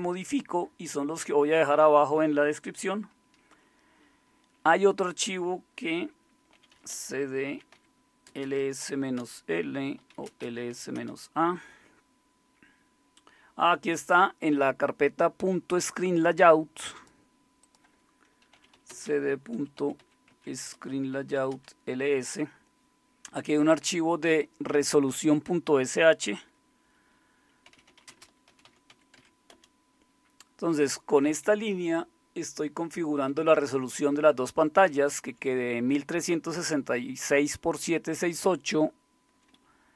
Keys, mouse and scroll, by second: 6.3-11.2 typing, 18.3-21.7 typing, 20.7 Return, 27.4-29.4 typing, 29.5 Return, 31.2 Down, 31.8-33.2 Right, 33.4 Right, 33.4 Right, 34.0 Right, 37.8 Right, 39.6 Right, 39.6 Left.